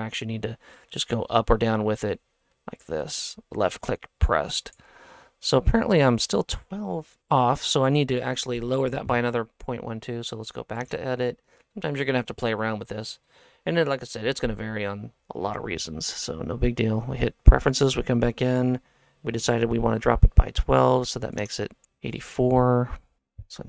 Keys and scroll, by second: 23.2 KP_4.